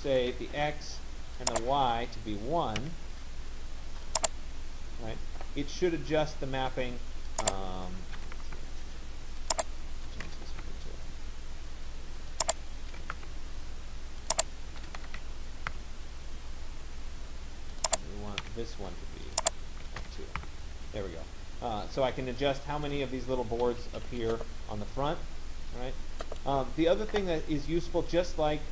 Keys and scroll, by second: 7.8 1, 8.5 Return, 10.3 2, 10.6 Return, 13.1 1, 13.2 Return, 15.1 2, 15.8 Return, 18.5 1, 20.1 2, 20.4 Return.